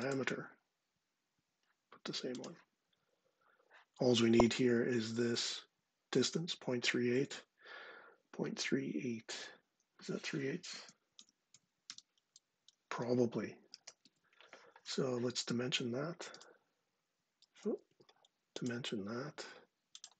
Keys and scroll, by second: 10.3 super+space, 13.4 super+c, 16.0 d, 17.2 ↻.